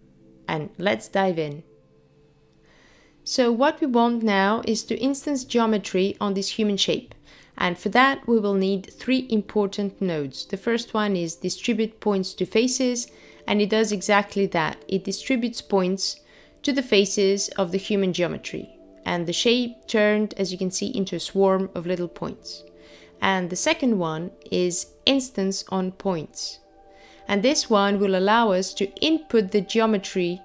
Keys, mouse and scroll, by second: 2.8 click, 3.3 shift+a, 3.8 click, 11.9 click, 13.5 click, 15.8 click, 19.3 click, 20.0 shift+a, 20.3 click.